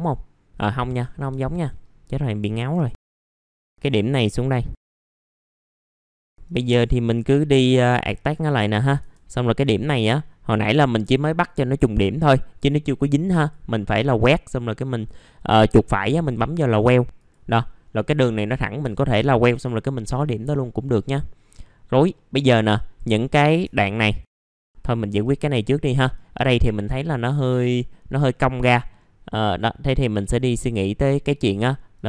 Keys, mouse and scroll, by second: 0.5-1.3 scroll up 1, 1.3 Delete, 1.8-2.4 scroll up 1, 2.4 ctrl+right click, 3.0 click, 4.9 shift+click, 5.2 shift+click, 5.8 right click, 6.1 F3, 6.2 right click, 7.5 click, 8.7 right click, 9.4 click, 9.9 right click, 13.3 right click, 13.3 click, 18.0 Delete, 18.8 F3, 19.2 middle click, 21.2 scroll up 1, 22.1 middle click, 22.6 click, 23.3 middle click, 23.8 ctrl+click, 24.2 middle click, 24.6 middle click, 24.8 click, 25.9 middle click, 26.1 scroll down 1, 27.7 middle click, 27.9-28.5 scroll down 1, 28.5-29.3 scroll up 1, 29.3 click, 31.9 right click.